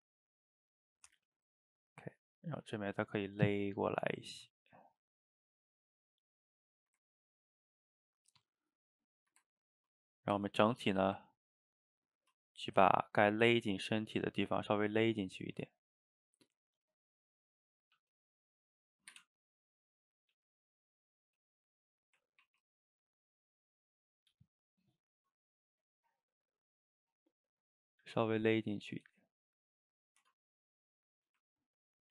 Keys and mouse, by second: 1.3 click, 1.5-2.9 middle drag, 2.9 g, 4.5-5.0 middle drag, 5.0 a, 5.1 a, 5.3-8.4 middle drag, 8.4 click, 8.7-9.2 middle drag, 9.2 shift+right click, 9.5-10.4 ctrl+middle drag, 10.4 Tab, 10.8 a, 10.9 a, 11.3 ctrl+right click, 12.2-12.7 middle drag, 12.7 g, 14.1-14.9 middle drag, 14.9 g, 16.2-16.8 middle drag, 16.8 click, 17.0 shift+click, 17.2 shift+click, 17.5 shift+click, 18.0 g, 19.6 click, 20.0 click, 20.3 g, 21.1 click, 21.3 g, 22.0 drag, 22.5 ctrl+t, 24.3 g, 25.4 click, 25.5 middle click, 26.0 g, 26.9 middle click, 27.8 click, 28.1 g, 28.8 click, 29.0 g, 29.8-30.2 middle drag, 30.2 Tab, 30.5 click, 30.8-32.1 middle drag.